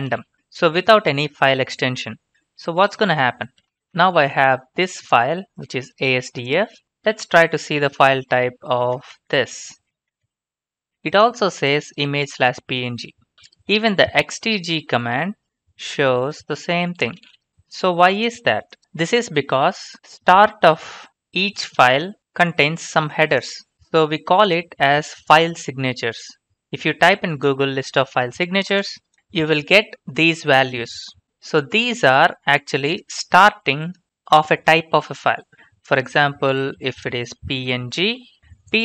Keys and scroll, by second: 0.0-0.7 typing, 3.4-4.3 typing, 7.6-10.4 typing, 14.5-17.8 typing, 36.2 ctrl+f, 37.2-38.2 typing, 38.4 Return.